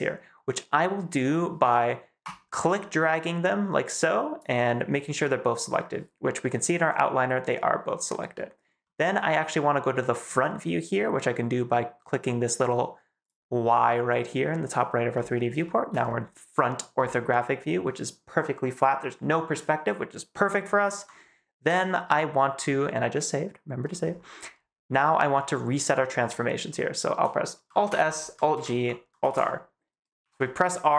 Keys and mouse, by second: 2.2 click, 2.7-4.3 drag, 8.8 middle drag, 9.0 click, 9.0 right click, 13.1 click, 15.5 shift+middle click, 21.5 ctrl+s, 27.8 alt+s, 28.4 alt+g, 29.1 alt+r, 30.1 x, 30.1 r.